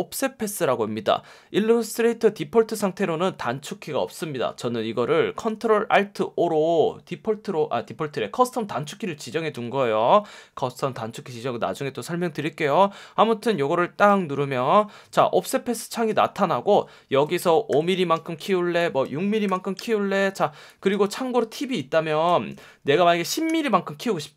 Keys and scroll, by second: 9.5 F1, 17.7 5, 18.1 Tab, 19.4 6, 19.7 Tab, 23.4 1.